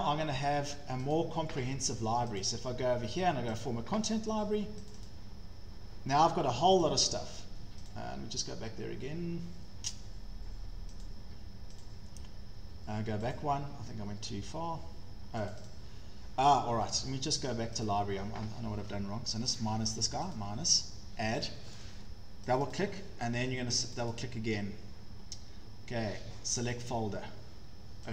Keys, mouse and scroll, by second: 1.2 click, 2.4 click, 3.6 click, 5.0 click, 5.1 click, 6.9 click, 7.9 click, 11.0 click, 11.8 click, 13.4 click, 15.7 click, 15.9 click, 17.9 click, 19.6 click, 20.4 click, 21.4 click, 22.6 click, 22.7 click, 24.0 click, 24.1 click, 26.7 click.